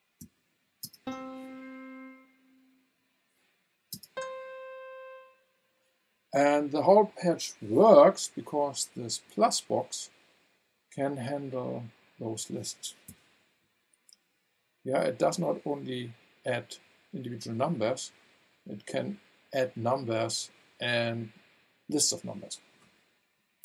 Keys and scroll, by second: 0.2 v, 0.8 space, 3.9 space, 13.1 v.